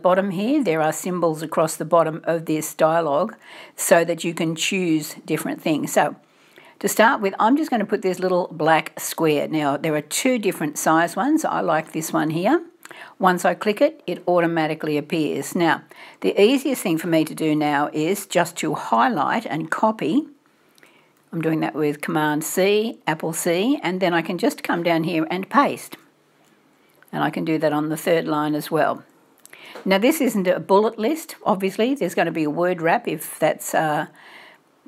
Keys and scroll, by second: 19.3 super+c, 19.3 super+v.